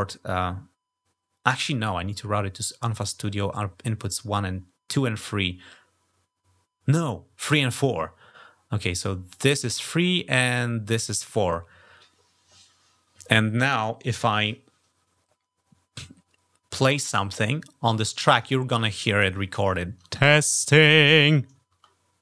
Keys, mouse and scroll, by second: 9.1 click, 10.9 click, 16.8 click, 18.7 click, 19.8 -.